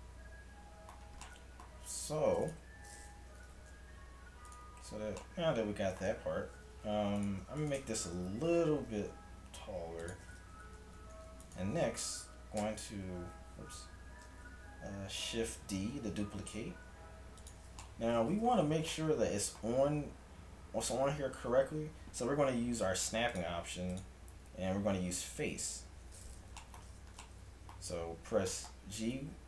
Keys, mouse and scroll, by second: 3.5 g, 6.8 Tab, 7.4 Tab, 7.8 Tab, 8.9 g, 10.5 a, 10.9 Tab, 11.5-13.8 right drag, 12.6 shift+g, 15.6 shift+d, 23.3-25.9 drag, 26.6-28.8 middle drag.